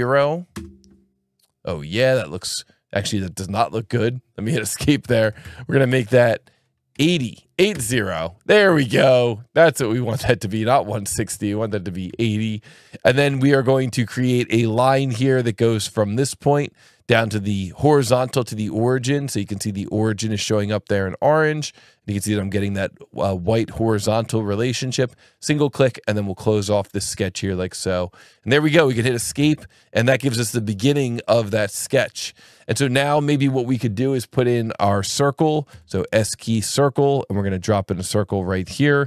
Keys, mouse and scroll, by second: 0.5 KP_Enter, 4.8 Escape, 5.9 click, 6.9 KP_8, 7.0 KP_0, 7.7 KP_Enter, 10.0 click, 13.2 s, 14.1 click, 15.9 click, 25.2 click, 27.0 click, 28.9 Escape, 29.7 click, 31.1 click, 32.4-35.7 scroll, 35.7 s, 36.3-36.6 scroll, 36.6 click, 38.4 click.